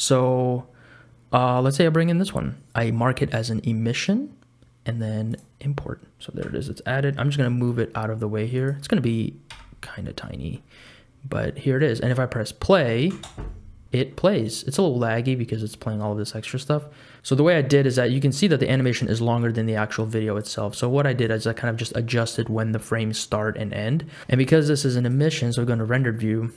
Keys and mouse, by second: 6.6 g, 9.5 KP_Decimal, 10.7 middle click, 11.6 middle click, 13.1 space, 14.3 click, 18.9-21.8 drag, 24.2 s.